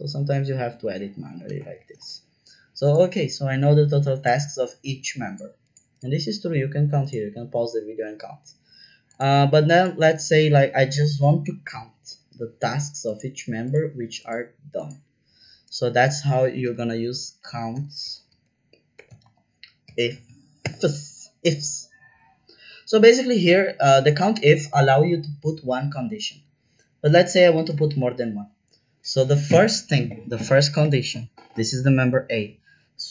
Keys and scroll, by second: 0.3 Left, 0.5 Left, 1.4 BackSpace, 1.7 shift+d, 1.9 Return, 16.6-20.6 typing, 27.5 shift+9.